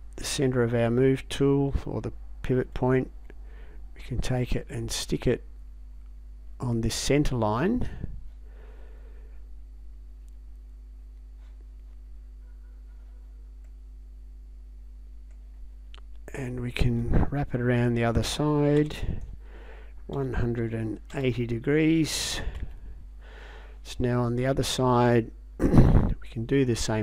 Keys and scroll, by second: 18.8 space, 20.1 1, 20.6 8, 21.1 0, 22.6 Return.